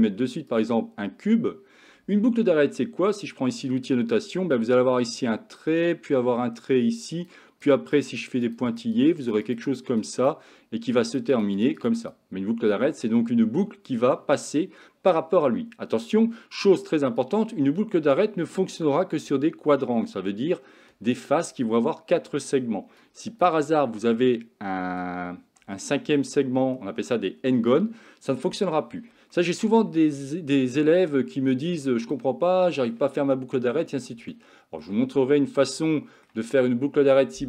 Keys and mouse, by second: 3.2 click, 4.8-7.3 drag, 7.7 click, 8.0 click, 8.2 click, 8.5 click, 8.7 click, 9.0 click, 9.3 click, 9.5 click, 9.7 click, 9.9 click, 10.2 click, 11.1 click, 11.4 click, 11.6 click, 11.8 click, 12.0 click, 17.2-21.6 ctrl+drag, 23.0 ctrl+click, 24.1 middle click, 25.8 shift+middle click, 29.4 middle click, 31.2 shift+middle click, 32.2 middle click, 34.4 shift+middle click, 36.0 shift+middle click.